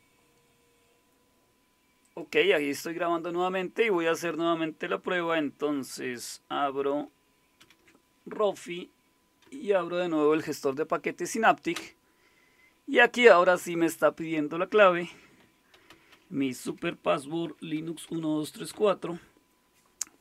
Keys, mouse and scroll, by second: 0.0 click, 2.5 click, 7.6 alt+super+d, 9.4 Down, 11.7 Return, 15.2-18.7 typing.